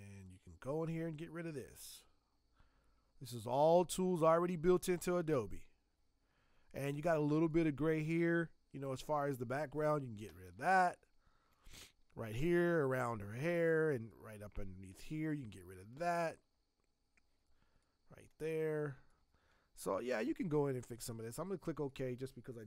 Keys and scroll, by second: 4.9 space, 10.5 space, 18.9 space.